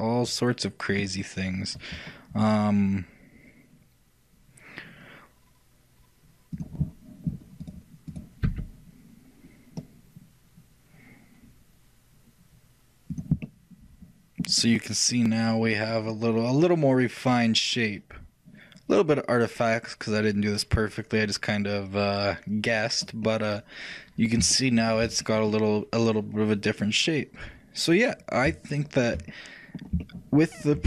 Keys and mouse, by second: 13.5-18.1 middle drag, 20.3 middle click, 23.0-27.7 middle drag, 28.8-30.8 shift+middle drag.